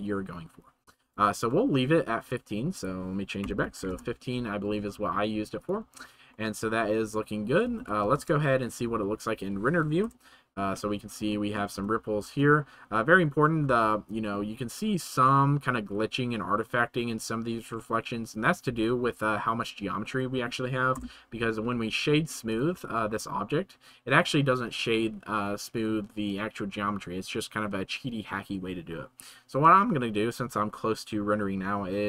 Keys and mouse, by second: 1.4-1.8 middle drag, 2.3-3.9 drag, 5.6-6.3 right drag, 6.3-7.5 middle drag, 8.3 shift+middle click, 10.0 KP_0, 11.7 space, 12.2 space, 19.2 click, 20.0 middle click, 20.9 KP_0, 22.0 right drag, 22.5-23.4 drag.